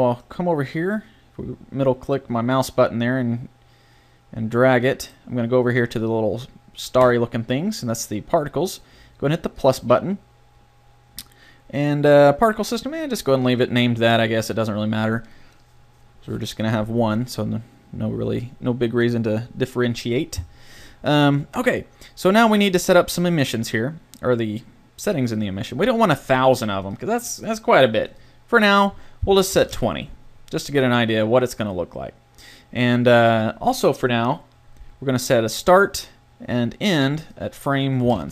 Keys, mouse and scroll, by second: 7.0-8.8 drag, 8.8 middle click, 9.5-11.1 drag, 37.2-38.3 middle drag.